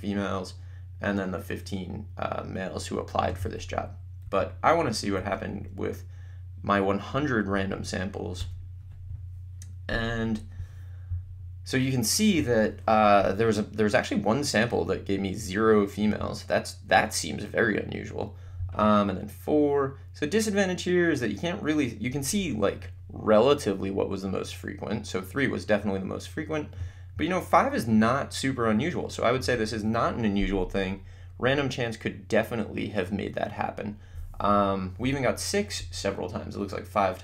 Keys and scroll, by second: 4.3 Down, 5.2 Up, 8.4 Return.